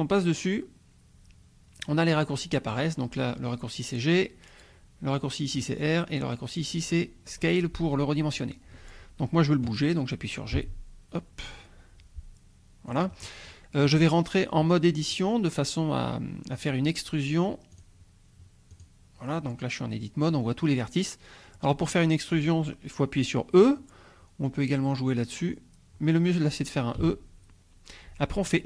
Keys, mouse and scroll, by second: 10.5 g, 12.9-15.2 drag, 17.7 click, 18.7 click, 21.2-21.5 scroll down 1, 27.0 e.